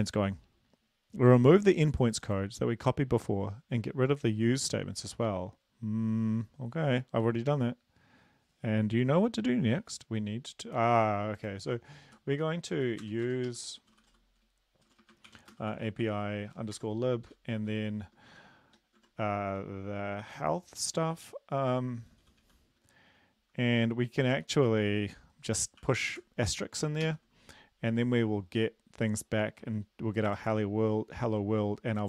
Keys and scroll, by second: 12.1 Up, 12.4 Up, 12.7 Down, 13.0 Return, 13.3 Return, 13.5 Up, 13.9-17.9 typing, 16.7 Tab, 19.0 Tab, 22.7 typing, 25.8 typing, 27.0 ctrl+s.